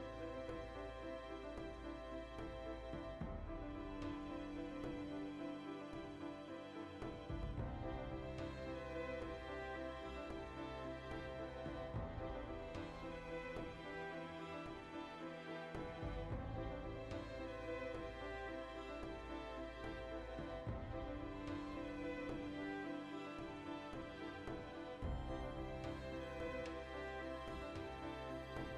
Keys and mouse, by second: 1.3 shift+click, 2.0 click, 2.7 ctrl+z, 3.7 ctrl+KP_Add, 5.2 shift+click, 6.3 Tab, 6.5-15.0 ctrl+middle drag, 15.0 shift+right click, 15.8 ctrl+l, 16.2-17.1 drag, 17.1 right drag, 17.2 Tab, 18.2-19.1 drag, 19.1 shift+middle click, 19.7 3, 20.1-21.9 alt+right drag, 21.9 click, 22.7 Tab, 22.8-28.7 ctrl+middle drag, 26.5 \.